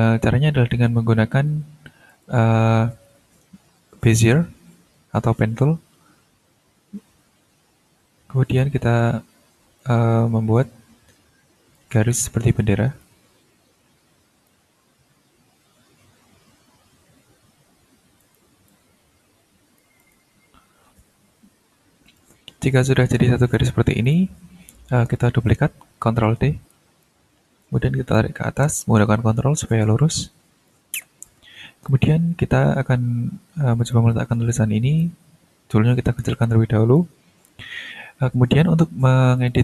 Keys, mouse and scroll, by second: 0.7 ctrl+s, 2.1 click, 4.1 click, 6.8-7.2 ctrl+scroll up 2, 8.5 click, 9.8-11.9 drag, 13.0-14.6 drag, 18.2 click, 18.7-20.0 drag, 20.0 right click, 20.6-21.0 scroll up 1, 21.0 shift+scroll down 1, 22.0 click, 23.4 click, 24.0 click, 24.4 scroll up 2, 26.7 ctrl+d, 27.0 ctrl+click, 27.3 ctrl+t, 28.1-30.9 ctrl+drag, 31.0 ctrl+scroll down 1, 31.4 ctrl+scroll up 1, 31.9-34.1 ctrl+drag, 35.0-37.1 ctrl+drag, 37.5 ctrl+click, 39.4 click.